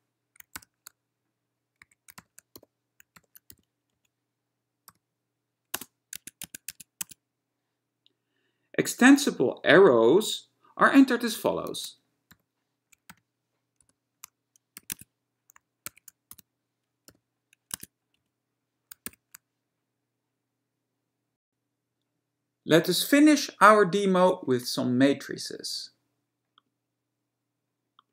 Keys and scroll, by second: 0.8 ^, 2.0 a, 2.8 b, 3.7 shift+c, 4.0 Right, 5.1 ,, 5.8 space, 6.3 Tab, 6.6 Tab, 6.8 Tab, 7.1 Tab, 11.9-15.0 typing, 15.0 Tab, 16.1 @, 16.5 x, 17.3 y, 17.9 Tab, 18.3 Right, 19.3 shift+f.